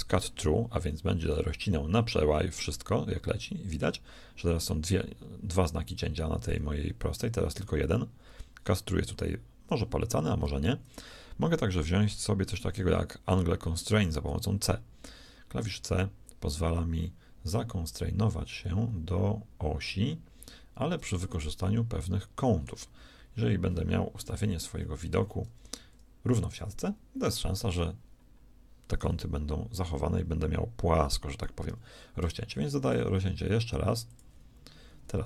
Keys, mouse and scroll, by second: 25.5 KP_3, 26.4 KP_1, 31.6 k.